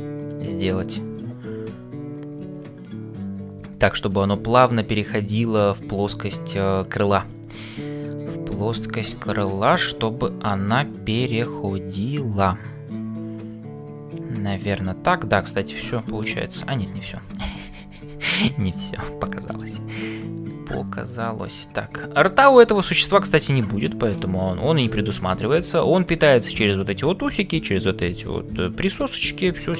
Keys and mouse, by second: 9.2 shift+middle click, 9.7-14.6 middle drag, 15.3 middle click, 17.2 middle click, 17.7 shift+middle click, 19.3 middle click, 20.5-24.4 middle drag, 23.8 s, 29.6 shift+middle click.